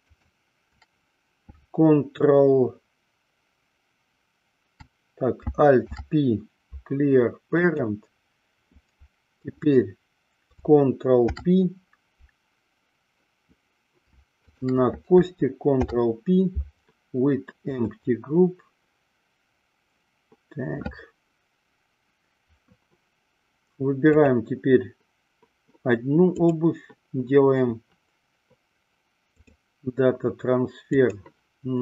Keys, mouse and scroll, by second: 6.0 alt+p, 11.3 ctrl+p, 14.6 shift+click, 15.8 ctrl+p, 24.4 click, 26.4-29.8 drag, 31.1 click.